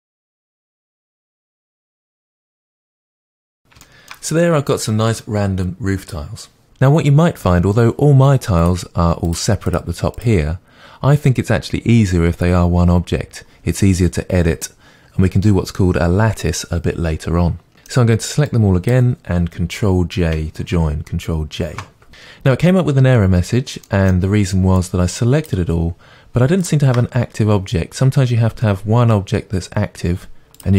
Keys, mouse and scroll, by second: 0.0-2.5 typing, 0.4 click, 1.2 middle drag, 1.8 middle click, 2.4 click, 2.7-6.6 middle drag, 3.0 scroll down 2, 3.4 scroll up 2, 6.6 click, 17.7-18.9 middle drag, 18.9 click, 22.1 ctrl+z, 23.9-25.5 middle drag, 25.5 click, 26.7 shift+click.